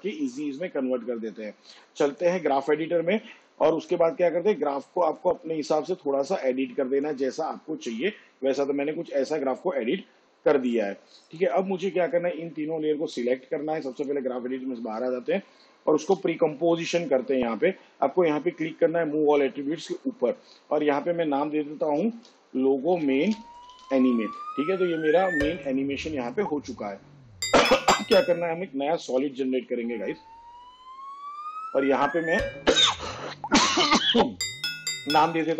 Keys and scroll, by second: 15.8 ctrl+shift+c, 21.8-24.6 typing, 29.0 ctrl+y, 35.1-35.5 typing.